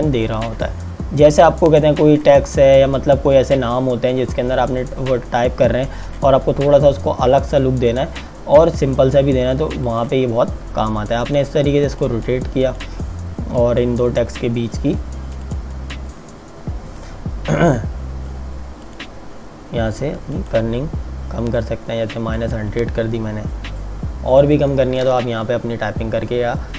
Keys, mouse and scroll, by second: 9.9 click, 15.5 click, 18.8 click, 26.5 scroll down 1.